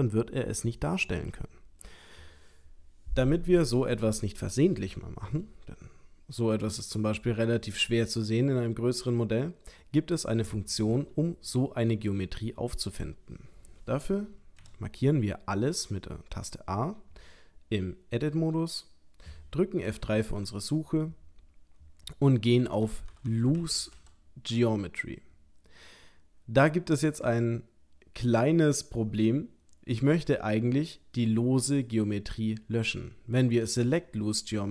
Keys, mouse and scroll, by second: 5.2 g, 7.1 click, 7.6 middle click, 10.2 middle click, 12.1 shift+middle click, 12.7 shift+middle click, 14.6 a, 19.9 F3, 23.3 o.